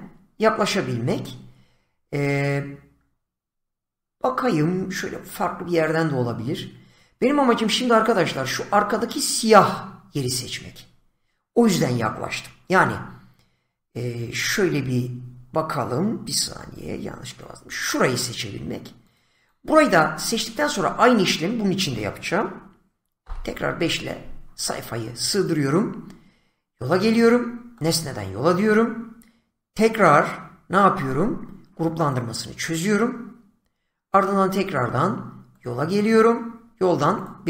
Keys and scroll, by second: 12.7 z, 16.5 <, 23.2 5.